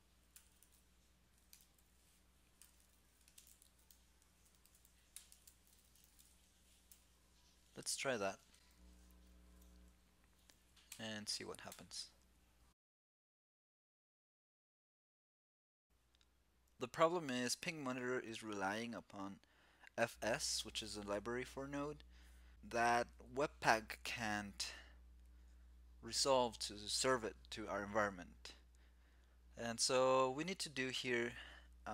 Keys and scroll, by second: 6.6 super+s, 8.9 shift+super+t.